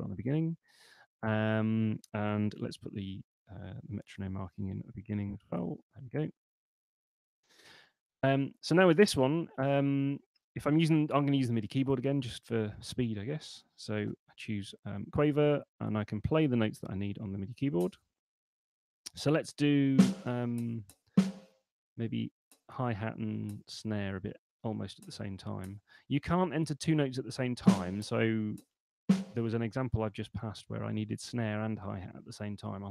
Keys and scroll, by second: 2.7 shift+t, 3.9-5.3 typing, 5.5 Return, 6.9 Escape, 14.2 5, 24.6 space.